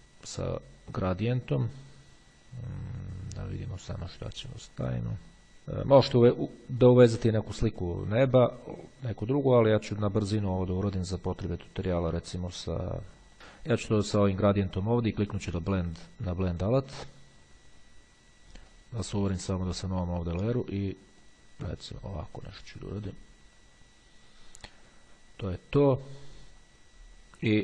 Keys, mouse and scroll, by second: 1.3-2.1 scroll down 1, 2.1-2.6 scroll down 1, 2.6-3.2 scroll down 1, 3.2-3.9 scroll down 1, 5.5-6.2 scroll up 2, 8.3-9.2 scroll up 2, 9.3-10.0 scroll up 2, 10.0-11.0 scroll up 1, 11.0 scroll up 1, 13.1 click, 14.3 click, 15.9 click, 16.5 click, 18.8 click, 19.7 click, 21.3-23.9 drag, 27.5-27.6 drag.